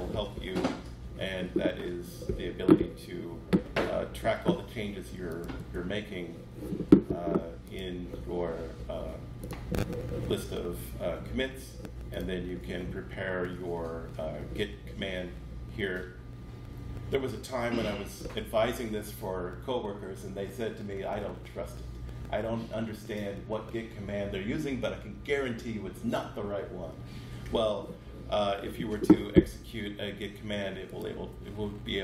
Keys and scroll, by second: 5.5 space.